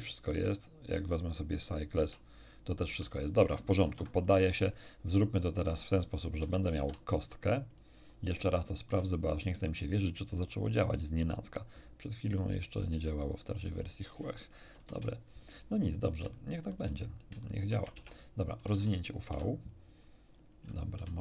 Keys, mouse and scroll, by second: 0.8 click, 1.5 click, 1.9 Tab, 2.8 Tab, 3.8 ctrl+n, 4.1 ctrl+click, 6.4 x, 6.5 shift+click, 6.7 shift+a, 7.6 click, 8.5-9.8 shift+middle drag, 10.8-11.4 drag, 12.2 click, 12.8-13.6 drag, 14.7 shift+F10, 16.3 shift+middle click, 17.4 shift+middle click, 17.9 Tab, 19.2 u, 20.9 u.